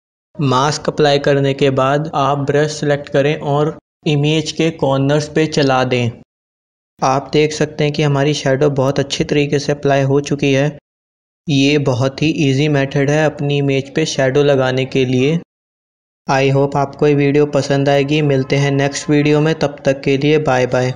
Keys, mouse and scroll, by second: 0.9 alt+BackSpace, 2.7 b, 3.9-6.5 typing, 5.9 click, 6.7-10.4 drag, 11.3-13.4 drag, 16.4 Tab.